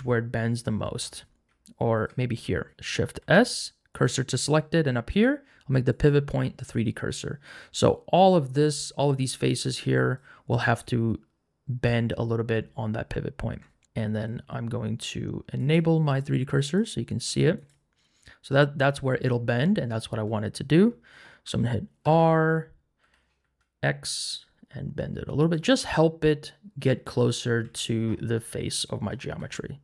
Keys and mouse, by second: 1.9 alt+click, 3.2 shift+s, 5.1 click, 13.5 3, 15.6 click, 16.8-17.8 drag, 22.0 r, 23.0 y, 23.4 x, 27.3 middle click, 27.6 Tab, 29.4 g.